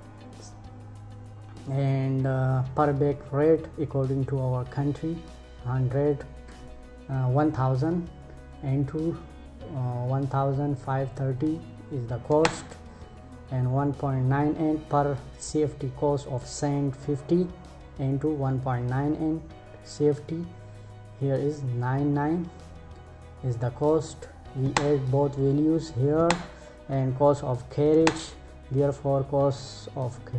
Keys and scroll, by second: 11.9 Return, 24.2 Return, 25.7 Return, 27.6 Return.